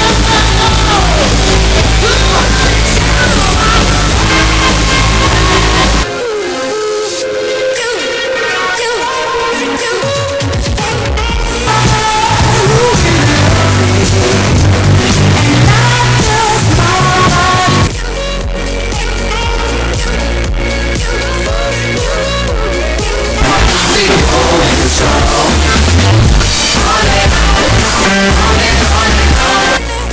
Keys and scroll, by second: 5.9 Page_Down, 18.2 Page_Down, 29.7 Page_Down.